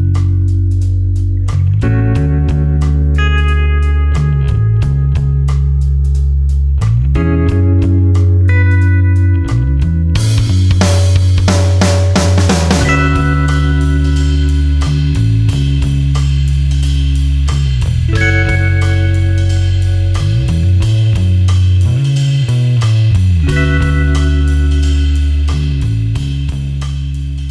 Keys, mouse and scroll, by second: 3.1 click, 5.7 click, 9.6 click, 15.8 click, 18.1 click, 24.8 space, 24.9 click.